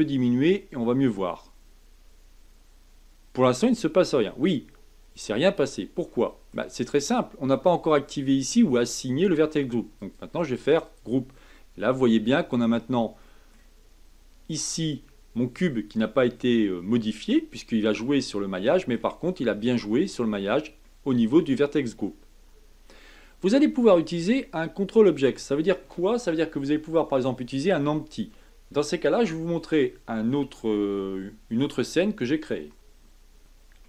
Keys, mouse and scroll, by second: 0.4-3.5 drag, 6.1-9.2 middle drag, 10.0-11.5 drag, 11.5-18.8 middle drag, 20.8-23.8 middle drag.